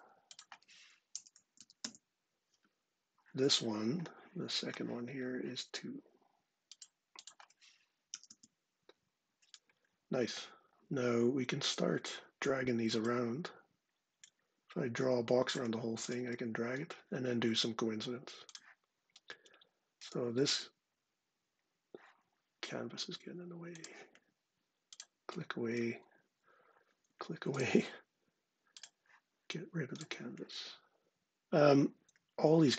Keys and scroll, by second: 0.6-1.8 typing, 7.8 typing, 11.1 ⟲, 25.8 ↻, 26.8 ↻.